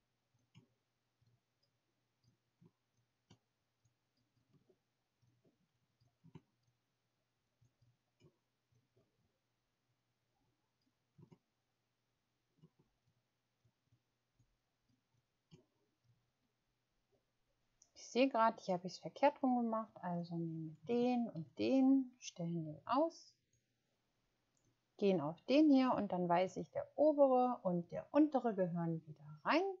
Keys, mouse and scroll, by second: 0.3 shift+click, 3.2 shift+click, 3.8 shift+click, 4.1 shift+click, 6.3 shift+click, 7.4 shift+click, 11.2 shift+click, 13.0 shift+click, 14.3 shift+click, 14.8 shift+click.